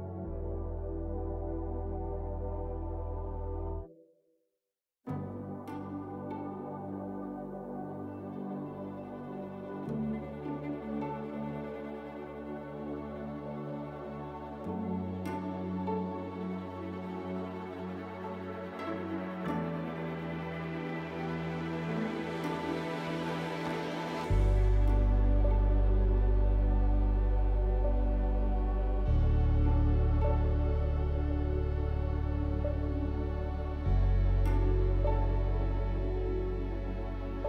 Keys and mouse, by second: 0.9 alt+click, 3.8 alt+shift+click, 5.6 alt+shift+click, 6.9 alt+shift+click, 8.9-10.7 drag, 11.5 KP_1, 27.8 click.